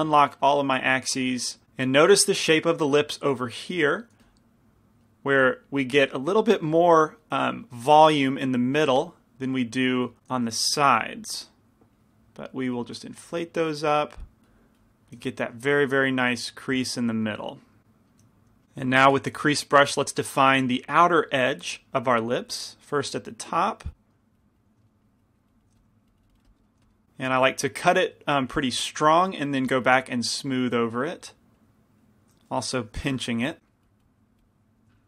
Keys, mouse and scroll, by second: 4.3 f, 5.5 f, 6.3-8.5 drag, 8.9 f, 10.5 shift+f, 11.8-15.4 drag, 15.6 click, 15.6 middle click, 16.1 click, 16.4 middle click, 17.0 middle click, 17.8 click, 18.3 right click, 18.6 f, 19.5 f, 19.5 shift+c, 21.8 f, 22.1 middle click, 23.8-27.4 drag, 24.9 middle click, 25.8 f, 26.7-28.2 middle drag, 26.9 f, 28.8 f, 29.7-33.6 drag, 33.6 p, 33.6 f, 33.7-35.0 drag.